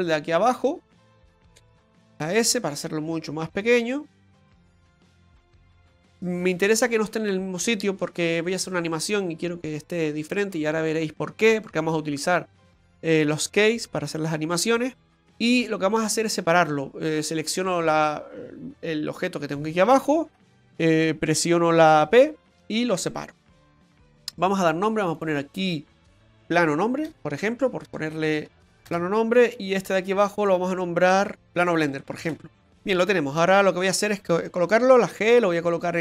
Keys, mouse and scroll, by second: 2.1 s, 4.8 f, 5.5 right click, 6.1 right click, 6.8 right click, 15.3 click, 16.2 click, 18.1 click, 18.1 right click, 22.0 p, 23.5 right click, 25.1 click, 25.3 click, 27.2 BackSpace, 30.5 right click, 31.2 right click, 31.5 click, 33.8 right click, 34.9 g.